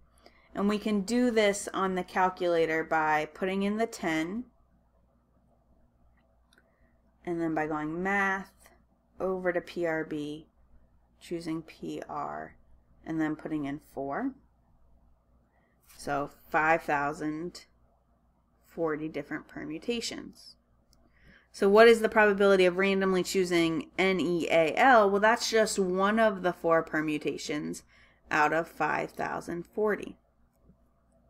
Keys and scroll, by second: 4.7 1, 5.8 0, 9.4 Left, 10.8 Down, 12.6 Return, 13.8 4, 14.9 Return.